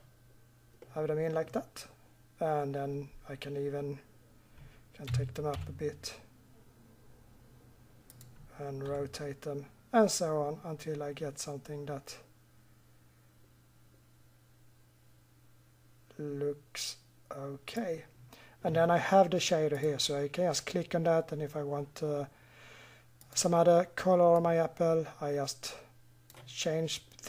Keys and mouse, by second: 1.2 middle click, 2.3 middle click, 3.4 middle click, 5.0 g, 8.9 r, 12.6-15.1 middle drag, 20.0-21.4 drag.